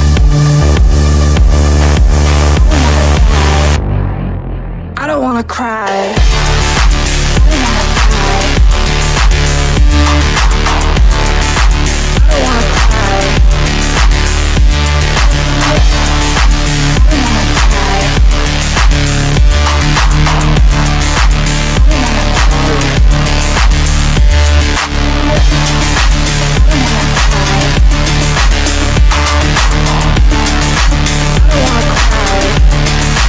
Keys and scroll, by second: 5.4 Delete, 9.1 Delete, 20.2-23.6 typing, 32.3 F3.